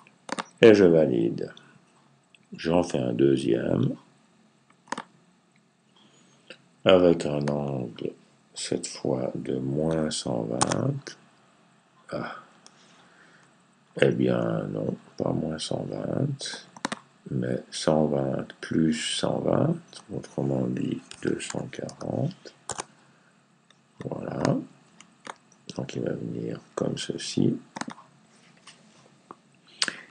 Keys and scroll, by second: 8.3 Left, 9.7 typing, 13.1 typing, 20.7-22.2 typing.